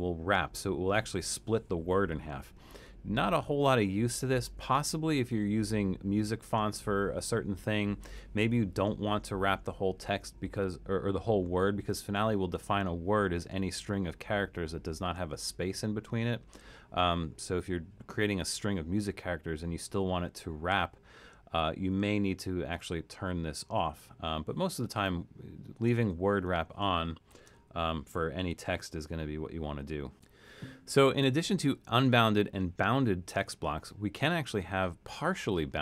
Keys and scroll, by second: 3.3 BackSpace, 3.7 BackSpace, 4.5 BackSpace, 5.3 BackSpace, 27.1-28.1 typing.